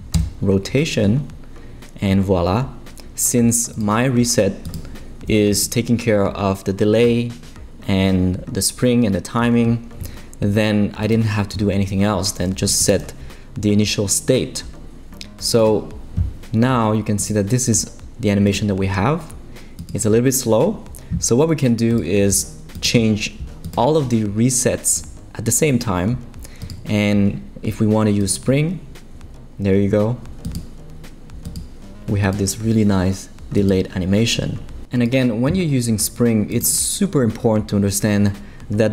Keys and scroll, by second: 0.1 Return.